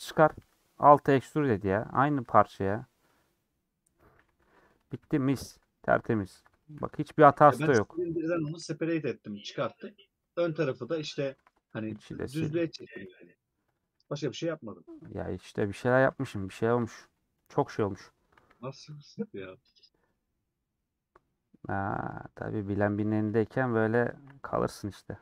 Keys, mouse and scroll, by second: 0.5 e, 1.4-5.1 middle drag, 5.1 2, 5.1 click, 5.6 3, 8.4 a, 10.1-11.3 middle drag, 11.3 3, 15.5 /, 16.2 Tab, 18.7 shift+click, 19.6 /, 19.8 middle click, 20.3-20.7 scroll down 2, 20.7-22.6 middle drag, 22.6 Tab, 22.7 middle click, 22.9 3, 23.5 middle click, 23.9-25.2 alt+shift+drag.